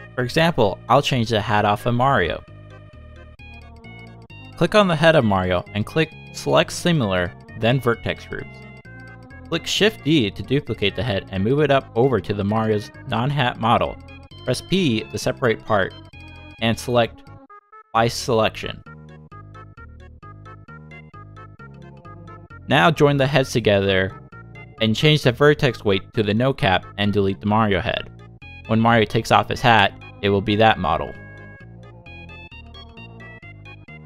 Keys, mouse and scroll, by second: 1.9 click, 3.5 click, 9.4-10.0 scroll down 2, 10.0 ctrl+c, 11.3 z, 11.7 z, 12.1 middle click, 12.3 shift+middle click, 12.6 shift+d, 13.6 shift+middle click, 13.9 g, 15.3 shift+middle click, 15.3 scroll up 3, 15.6 g, 17.7 shift+middle click, 18.3 p, 19.1 Tab, 19.3 click, 19.7 shift+click, 20.4 ctrl+j, 20.8 click, 21.1 Tab, 21.7 click, 22.4 l, 23.6 click, 24.1 Tab, 24.3 Tab, 24.6 click, 25.2 click, 26.1 click, 26.9 l, 28.1 click, 29.9 click, 33.7 l.